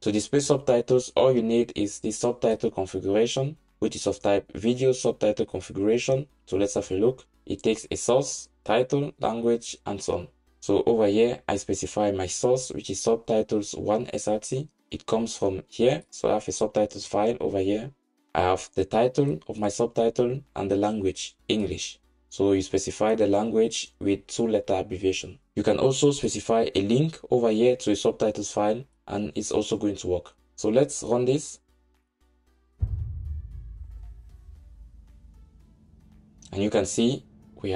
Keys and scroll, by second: 6.4 super+b, 31.1 ctrl+shift+r.